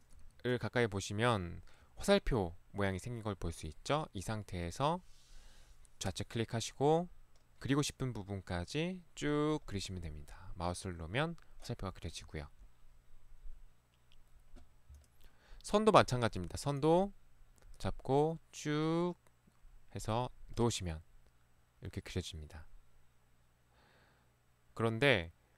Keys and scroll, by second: 0.2 ctrl+1, 0.2 Escape, 0.3 ctrl+1.